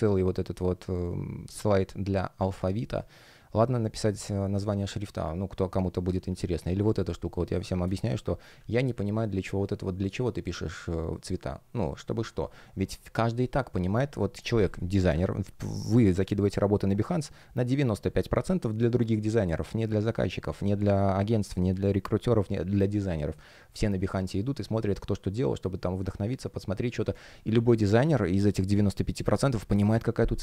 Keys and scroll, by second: 1.0 space, 7.3 space, 14.6 space, 22.4 space.